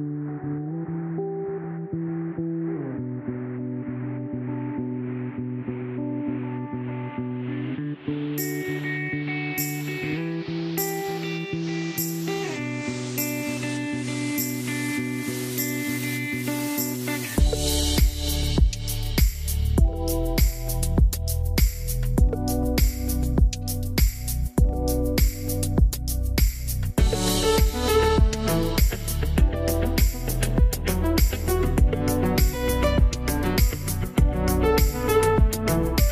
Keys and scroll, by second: 27.8 alt+q, 28.7 ctrl+z, 29.7 alt+q.